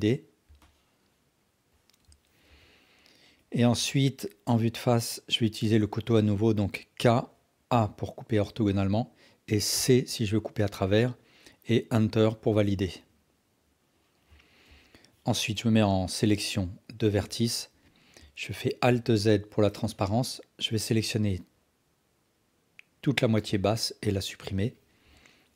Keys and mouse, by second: 0.6 alt+click, 1.7 alt+click, 2.5 KP_7, 7.0 k, 12.7-14.4 alt+drag, 14.7 KP_1, 17.1 1, 18.9 alt+z, 19.6-20.6 drag, 23.5 x, 25.0 KP_7.